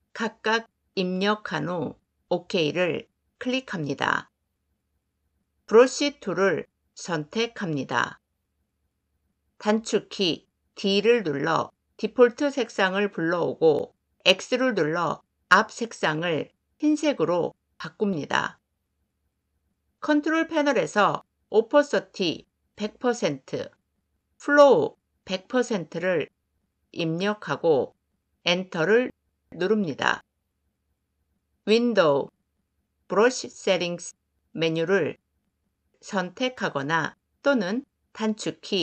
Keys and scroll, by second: 5.5 b, 10.6 d, 14.2 x, 28.4 Return, 31.5 F5.